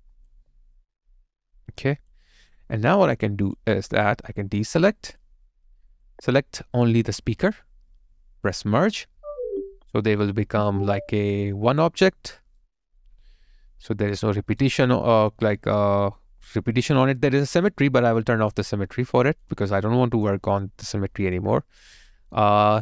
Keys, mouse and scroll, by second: 0.3 alt+click, 2.3 alt+right click, 2.8 alt+middle click, 3.3 alt+click, 4.6 alt+right click, 6.8 alt+right click, 12.1 alt+middle click, 12.6 alt+right click.